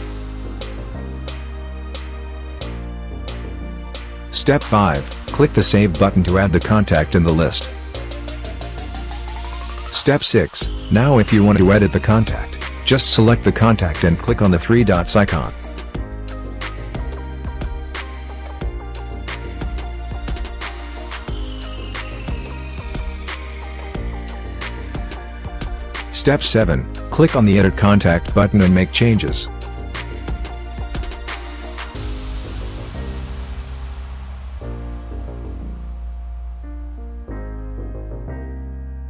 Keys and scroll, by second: 0.0-0.2 typing, 0.2 Escape, 37.0-38.9 typing.